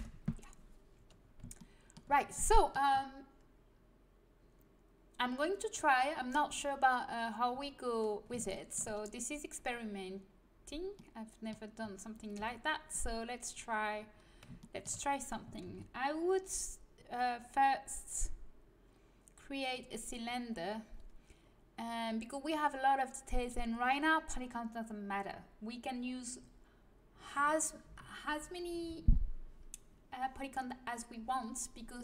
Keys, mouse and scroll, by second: 12.3 KP_1, 15.8 shift+a.